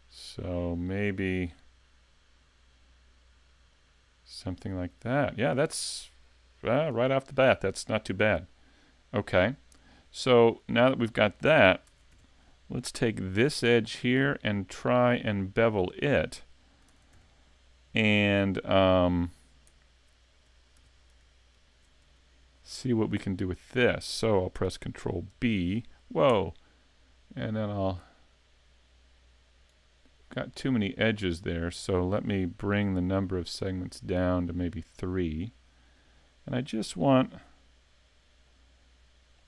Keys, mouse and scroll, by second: 1.4 click, 1.6 middle click, 9.3-9.6 scroll up 4, 9.8 scroll down 2, 10.2 middle click, 11.9 ctrl+Tab, 13.4 alt+right click, 13.9 scroll down 1, 14.2 middle click, 15.6 scroll up 2, 16.0 middle click, 16.9 ctrl+Tab, 17.7 middle click, 20.7 a, 21.5 alt+right click, 22.1 middle click, 23.2 scroll up 1, 23.7 shift+middle click, 25.3 ctrl+b, 31.6 shift+click, 33.2 click, 33.7 click, 38.4 middle click.